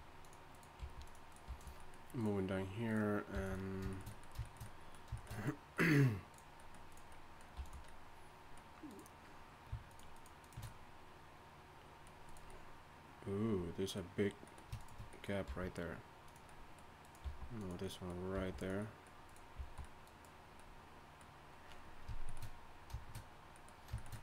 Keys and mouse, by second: 0.8 g, 1.5 g, 3.3 g, 6.5-8.5 drag, 7.5 g, 8.9-11.0 drag, 15.5 g, 16.4 click, 17.0-18.8 drag, 17.2 g, 18.3 g, 19.2 click, 19.6 g, 21.1 click.